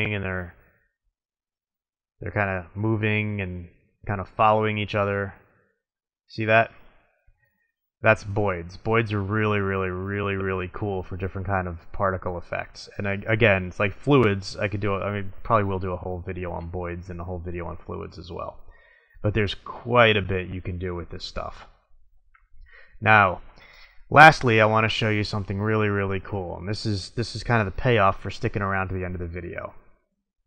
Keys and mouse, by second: 0.4-0.8 middle drag, 0.9 middle click, 1.0 middle click, 2.2-2.9 middle drag.